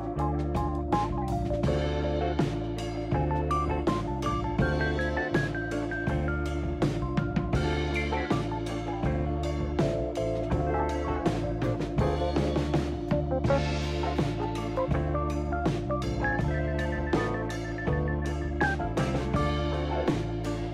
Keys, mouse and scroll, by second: 0.2 shift+s, 2.9 shift+s, 4.4 shift+s, 6.1 shift+s, 9.3 shift+s, 10.0 shift+s, 11.9 shift+s, 13.0 shift+s, 15.5 shift+s, 16.7 shift+s.